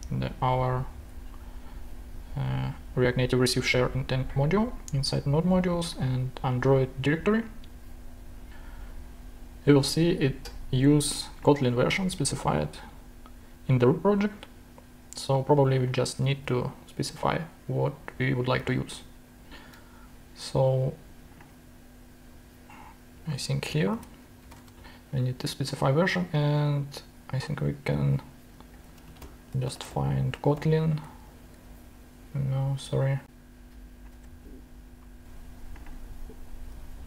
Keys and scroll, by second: 16.3 super+c, 18.6 super+Tab, 23.5 Return, 23.9 super+v, 24.3 super+space, 28.8 super+f, 28.9-31.1 typing, 34.1 super+g.